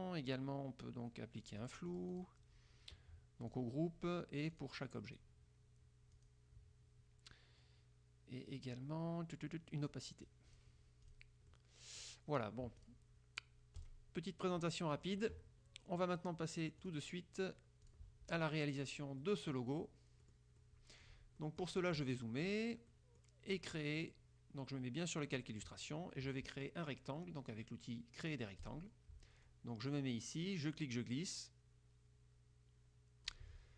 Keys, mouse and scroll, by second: 1.5 click, 3.7 click, 4.7 click, 5.2 click, 6.3 click, 10.0 click, 11.2 click, 11.6 click, 12.9 click, 13.9 click, 14.7 click, 16.9 click, 17.9 click, 19.3 click, 20.3 click, 21.5 click, 22.3 click, 23.1 click, 23.8 click, 25.4 click, 28.8 click, 30.7-33.6 drag.